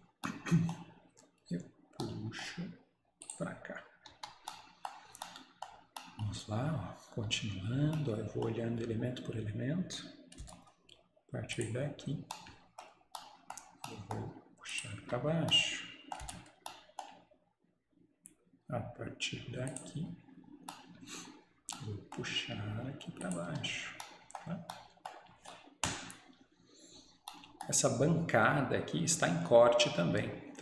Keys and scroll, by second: 0.9 Return, 4.2 Escape, 10.5 Return, 15.1 Escape, 16.2 Return, 21.1 Return, 23.5 Escape.